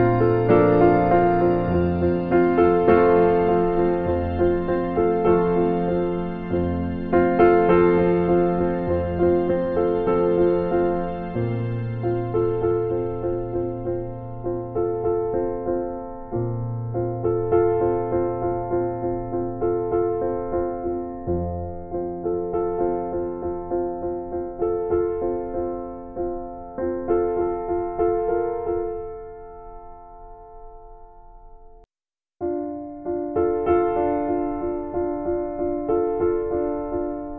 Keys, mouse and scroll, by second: 0.9 scroll up 1, 0.9 scroll down 1, 1.0-1.3 scroll up 1, 1.6 scroll down 1, 1.8-2.2 scroll up 1, 2.9-3.3 scroll down 1, 3.4-3.8 scroll up 1, 4.2-4.5 scroll down 1, 5.0 scroll up 1, 5.6 scroll up 1, 6.4-6.7 scroll down 1, 7.0-7.4 scroll down 1, 8.2 scroll down 1, 10.0 scroll up 1, 10.3-10.7 scroll down 1, 13.4-13.9 scroll up 1, 14.4 scroll down 1, 14.9 scroll up 1.